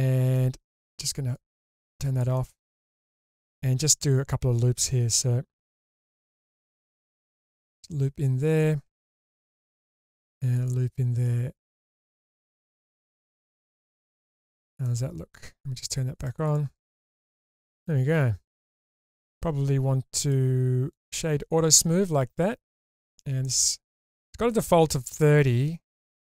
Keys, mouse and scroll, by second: 1.3 click, 2.3 middle click, 3.0-3.9 scroll up 2, 3.9-4.3 scroll up 2, 6.2 ctrl+r, 8.4 click, 9.5 ctrl+r, 12.5 click, 12.8-13.8 middle drag, 13.9 Tab, 14.5-14.9 scroll down 2, 14.9 middle click, 16.2 click, 16.5 click, 16.7 click, 17.3-18.7 middle drag, 20.2-21.1 drag, 20.2 right click, 23.0 click, 25.0 click.